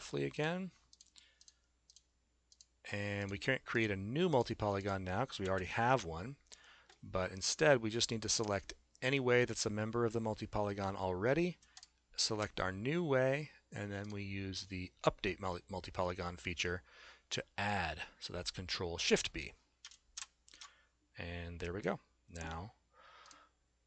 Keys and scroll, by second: 5.4 s, 20.3 ctrl+shift+b.